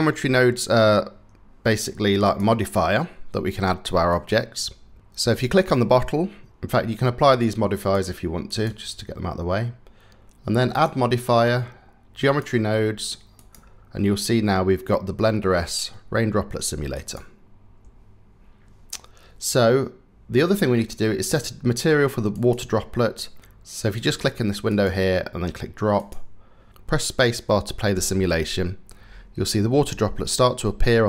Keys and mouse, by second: 1.8 click, 3.8 click, 5.2 click, 7.4-8.3 drag, 10.4-12.0 drag, 13.1-16.8 drag, 22.1-23.4 drag, 24.4-25.8 drag, 27.6 space.